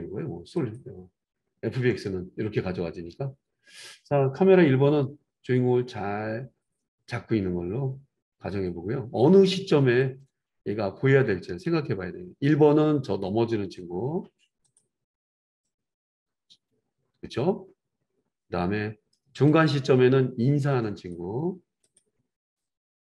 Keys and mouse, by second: 10.0-23.0 drag.